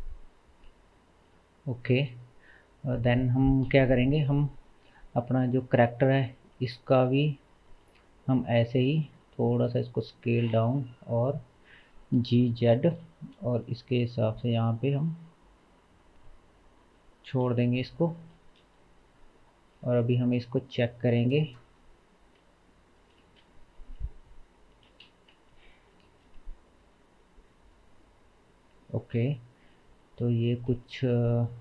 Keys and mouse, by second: 1.4 KP_0, 5.7-12.3 middle drag, 9.2 s, 11.3 g, 17.5 KP_0, 19.3-21.8 shift+middle drag, 21.8-31.6 drag, 23.2 space, 24.9 space, 25.3 shift+z, 26.1 space, 29.0 space, 30.5 g.